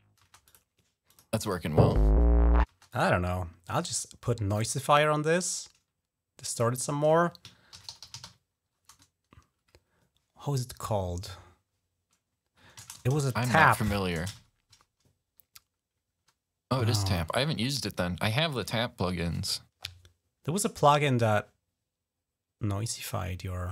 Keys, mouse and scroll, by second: 0.0 space, 0.3 click, 0.8 click, 1.2 click, 1.5 space, 2.4 space, 2.7 click, 4.3 right click, 4.4 right click, 6.2 click, 7.2-8.7 typing, 12.6 ctrl+a, 12.7-14.4 typing, 20.2 scroll down 2, 20.9 scroll down 2.